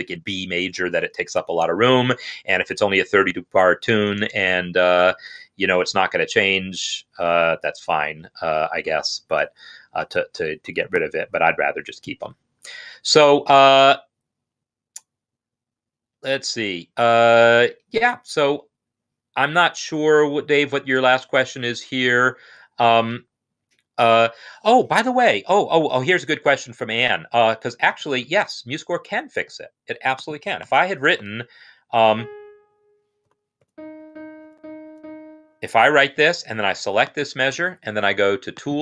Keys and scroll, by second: 30.6-31.2 typing, 32.3-34.7 typing, 35.7 Escape, 37.9-38.6 typing.